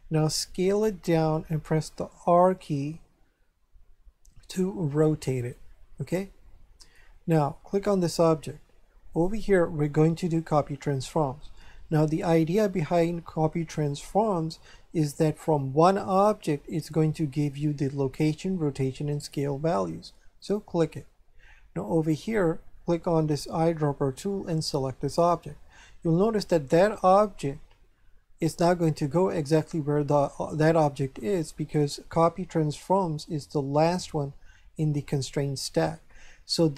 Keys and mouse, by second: 0.5 s, 1.3 click, 2.2 r, 5.4 click, 6.2 shift+middle click, 7.7 right click, 9.2 click, 20.4 click, 23.2 click, 25.1 click.